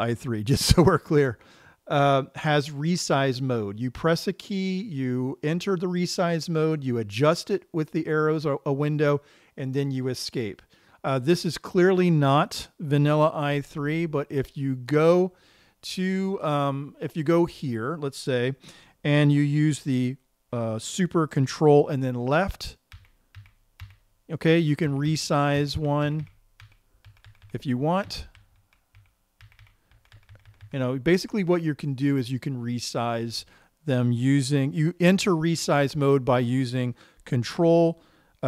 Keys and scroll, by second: 23.5 ctrl+super+Left, 24.3 ctrl+super+Left, 25.3 ctrl+super+Left, 26.1 super+Left, 26.6 ctrl+super+Left, 27.1 ctrl+super+Left, 27.6 ctrl+super+Right, 28.5 super+Left, 29.9 ctrl+super+Left, 30.0 ctrl+super+Left, 30.5 ctrl+super+Right, 31.0 ctrl+super+Right, 31.1 ctrl+super+Right.